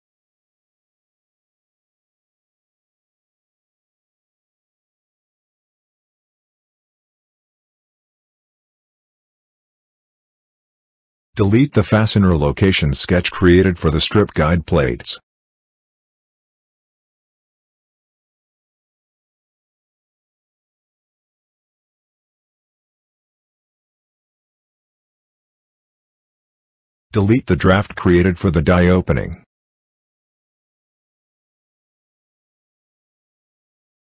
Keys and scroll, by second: 32.4 Delete.